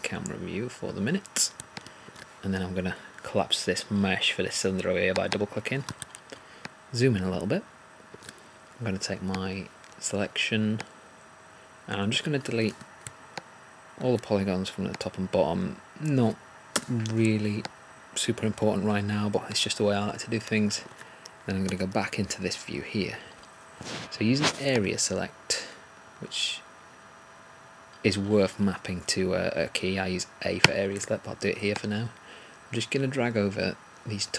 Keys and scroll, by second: 21.6 3.